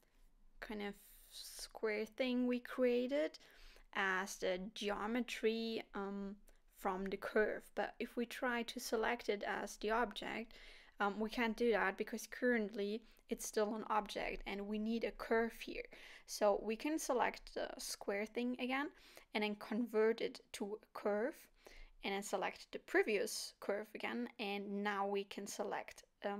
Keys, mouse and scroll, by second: 6.1 click, 6.1 scroll down 3, 9.0 click, 15.1 click, 21.1 click, 23.4 click, 24.1 middle click.